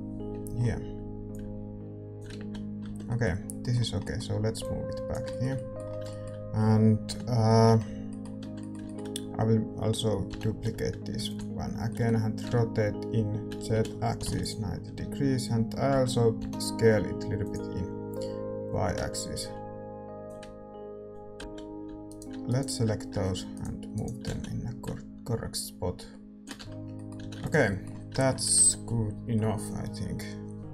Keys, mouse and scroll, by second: 0.5 middle click, 1.3-3.0 drag, 2.3 z, 3.0-4.6 middle drag, 4.6-7.0 drag, 7.0-11.1 middle drag, 7.0 KP_5, 8.4 Tab, 9.1 a, 10.2 l, 11.1 shift+d, 11.8 middle click, 12.4 r, 16.3 s, 18.6-21.4 drag, 21.4 a, 21.4 l, 21.4 z, 22.0-26.4 right drag, 24.2 z, 24.8-26.6 drag, 26.5 Tab, 26.6 middle click, 27.1 a, 27.6 ctrl+s.